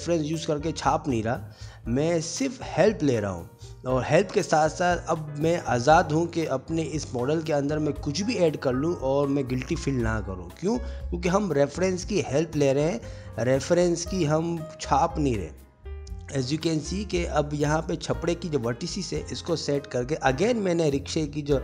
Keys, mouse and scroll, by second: 1.1 click, 1.2 alt+h, 1.4 click, 1.6 Tab, 1.8 alt+h, 1.9 shift+middle click, 2.0 shift+middle click, 2.9 middle click, 2.9 scroll down 1, 3.4 Tab, 3.4 middle click, 3.5 1, 3.6 click, 3.7 middle click, 3.9 shift+click, 4.0 middle click, 4.0 s, 4.3 middle click, 5.0 Tab, 5.0 middle click, 5.1 middle click, 5.5 middle click, 5.6 ctrl+s, 5.6 middle click, 5.9 middle click, 6.3 click, 6.7 Tab, 6.8 Tab, 7.6 click, 7.7 shift+click, 8.0 shift+click, 8.2 g, 8.6 s, 9.0 click, 9.1 s, 11.0 click, 11.5 shift+click, 11.7 shift+click, 12.1 s, 12.3 middle click, 13.2 click, 13.3 middle click, 13.6 ctrl+x, 13.7 middle click, 13.9 ctrl+z, 13.9 middle click, 14.2 middle click, 14.5 shift+click, 14.5 m, 15.2 g, 15.5 middle click, 16.4 click, 16.5 shift+click, 16.6 g, 17.3 middle click, 18.1 click, 18.5 alt+z, 18.6 click, 18.9 g, 19.7 middle click, 20.5 click, 20.6 middle click, 21.0 alt+z, 21.0 middle click, 21.2 click, 21.3 g.